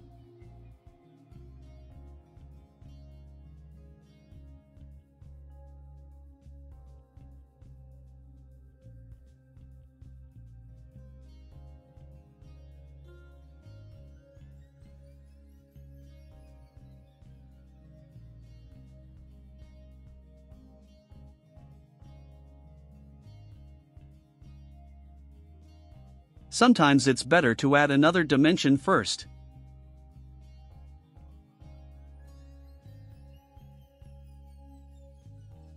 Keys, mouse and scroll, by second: 0.0 5, 0.7 Return, 2.8 scroll down 2, 3.6 right click, 7.3 click, 8.3 ctrl+click, 9.1 click, 10.0 click, 10.7 2, 11.0 0, 11.3 Return, 11.7 scroll down 2, 12.2 scroll up 2, 12.5 right click, 12.9-13.4 drag, 14.0-14.4 drag, 14.6 scroll down 2, 15.5-16.0 drag, 16.2-16.6 scroll down 4, 16.9 right drag, 17.4-17.9 scroll up 4, 18.1 right click, 18.8 click, 19.8 click, 20.9 ctrl+click, 22.0 click, 22.9 click, 23.4-24.8 typing, 27.8 click, 28.6 middle click, 29.0 right click, 29.9-30.6 drag, 31.8-32.5 drag, 32.8 middle drag, 33.2 click, 34.1 click, 35.5 click.